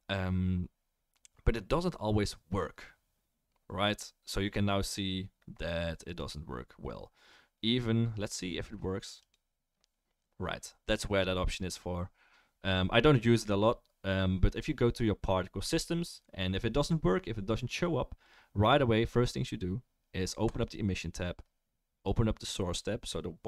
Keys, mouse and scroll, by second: 6.1-9.3 drag, 18.2 click, 18.2-23.4 right drag, 18.6-23.4 drag.